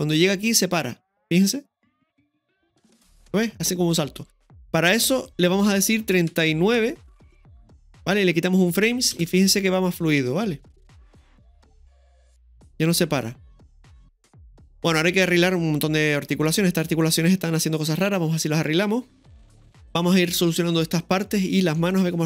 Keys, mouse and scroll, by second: 0.2-1.1 drag, 1.3 space, 5.2-7.3 drag, 9.1 space, 14.7-15.0 scroll down 1, 18.3 space, 19.1 scroll up 1, 19.3-20.3 middle drag, 19.3 click, 21.3-21.7 scroll down 1, 21.8 middle click, 22.0 space.